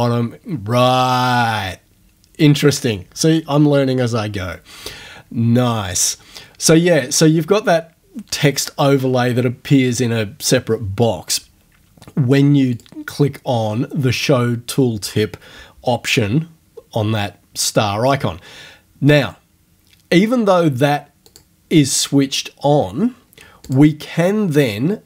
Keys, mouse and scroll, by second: 12.8 click, 19.1 click, 21.3 click, 23.7 click.